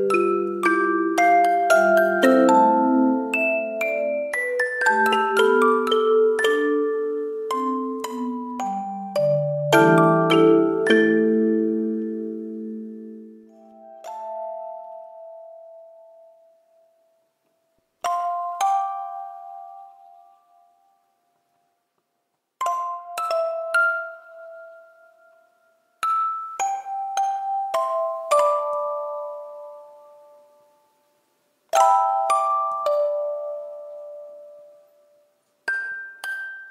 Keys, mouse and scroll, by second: 2.2 ctrl+z, 4.2 ctrl+z, 5.4 e, 6.1 ctrl+z, 7.0 e, 7.9 double click, 10.0 b, 12.3 double click, 12.5 double click.